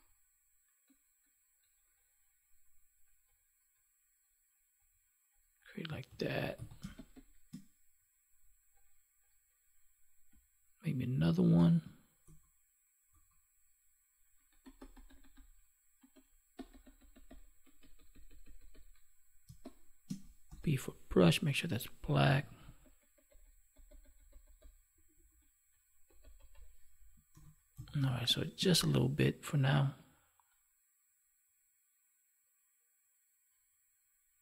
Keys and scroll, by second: 6.1 ctrl+s, 6.7 space, 11.5 alt+BackSpace, 19.4 space, 27.3 ctrl+s, 28.0 space.